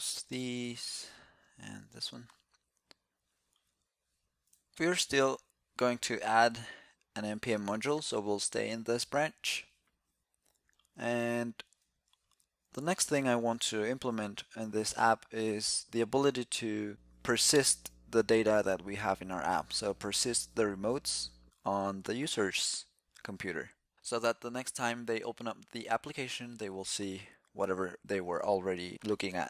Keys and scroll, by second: 1.5 super+b.